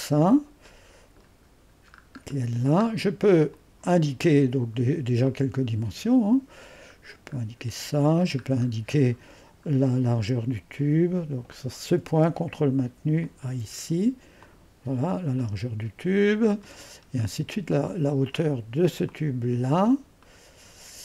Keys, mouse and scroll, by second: 0.1-0.7 scroll up 1, 0.7 middle click, 1.3-3.1 scroll up 1, 3.1-3.5 scroll up 1, 3.5-4.7 drag, 5.3-6.7 drag, 7.0-7.7 scroll up 1, 7.7 typing, 8.7-11.1 scroll up 1, 11.1-11.5 scroll up 1, 11.5 click, 13.3 click, 14.5-17.0 drag, 16.0 typing, 17.0-18.1 scroll down 1, 18.1-19.6 drag, 19.6-20.9 scroll down 1, 20.9-21.0 drag.